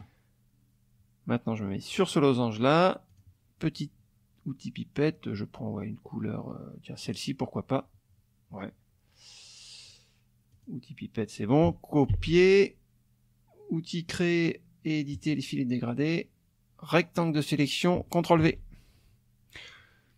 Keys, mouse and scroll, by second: 1.9 click, 3.1 click, 7.0 click, 10.5 click, 12.1 ctrl+c, 15.1 click, 16.0-17.7 drag, 18.4 ctrl+v.